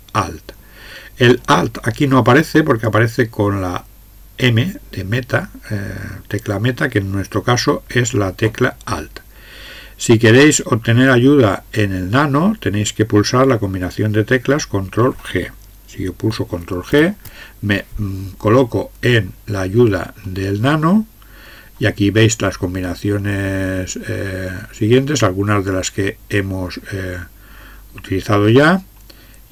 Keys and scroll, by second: 16.9 ctrl+g.